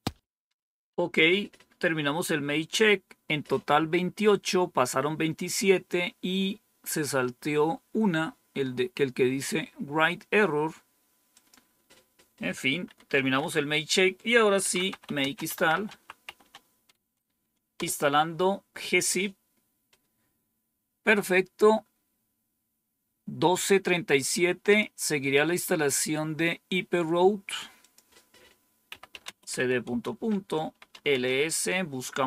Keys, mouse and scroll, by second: 1.1 Up, 2.5 Down, 11.2 click, 12.8 Up, 13.3 Down, 14.3-16.8 typing, 24.5 click, 27.7 click, 28.6-31.3 typing.